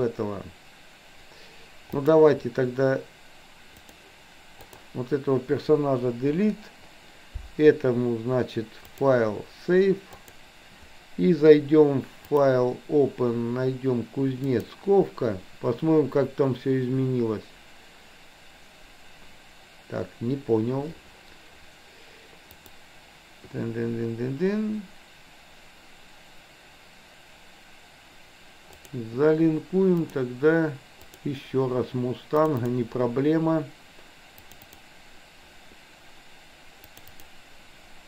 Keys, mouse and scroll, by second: 2.1 click, 4.0 drag, 4.6 click, 6.3 Delete, 9.0-10.5 drag, 12.2-15.6 drag, 22.6-29.0 drag.